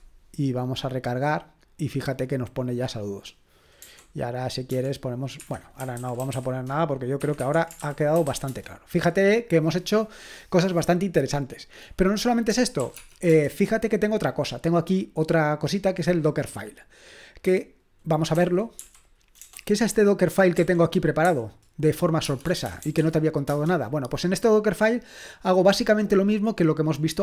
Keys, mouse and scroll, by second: 0.0-0.2 typing, 1.3-3.8 drag, 3.8-4.7 typing, 5.4 Escape, 5.7-8.7 typing, 7.2 Escape, 7.4 Escape, 12.5-12.9 typing, 13.3 Return, 18.4-19.4 typing, 20.6-24.0 typing.